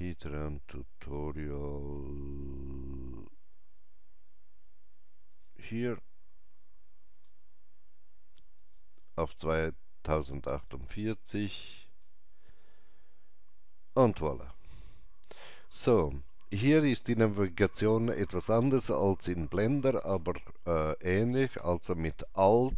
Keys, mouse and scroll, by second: 5.3 click.